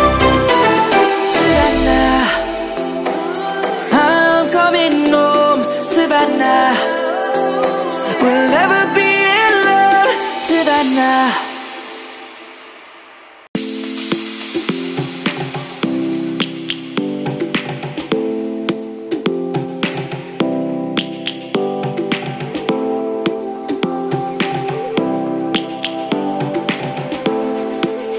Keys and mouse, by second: 0.4 shift+d, 1.1 right click, 6.4 middle click, 8.3 middle click, 13.0 shift+click, 13.4 shift+click, 13.9 shift+click, 14.9 ctrl+-, 16.2 middle click, 17.9 click, 18.8 click, 19.1 ctrl+z, 19.6 middle click, 23.7 ctrl+z, 24.7 middle click, 26.3 ctrl+7, 27.9 shift+middle click.